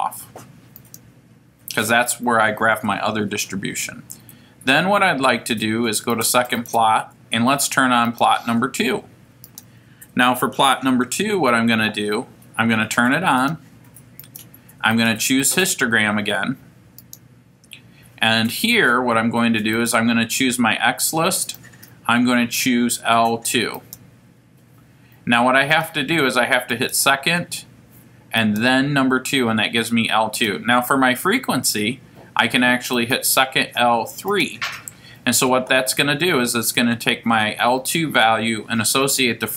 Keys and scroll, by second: 0.8 Return, 8.0 Down, 9.4 Return, 14.2 Down, 14.9 Right, 17.0 Return, 19.7 Right, 21.4 Down, 23.7 2, 25.7 Left, 28.4 2, 30.3 Down, 34.3 3.